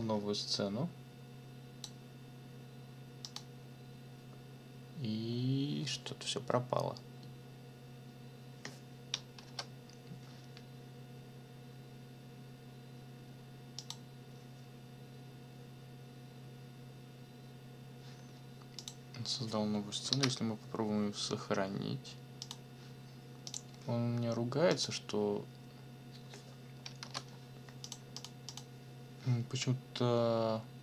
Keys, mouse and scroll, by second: 9.4 ctrl+l, 13.8 click, 18.8 click, 20.1 ctrl+s, 22.4 click, 23.5 click, 24.7 click, 27.0 ctrl+l, 27.8 click, 28.2 click, 28.5 click.